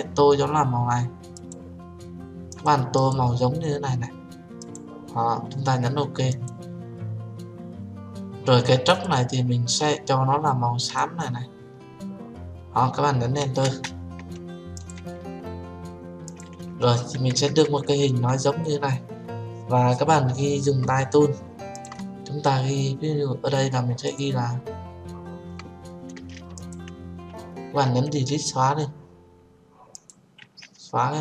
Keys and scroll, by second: 14.0 Return, 28.2 Delete.